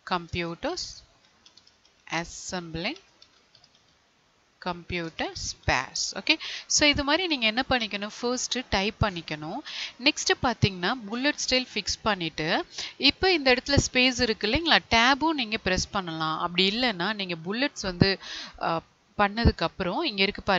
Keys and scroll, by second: 0.2 space, 2.1 space, 5.0 space, 14.6 Tab.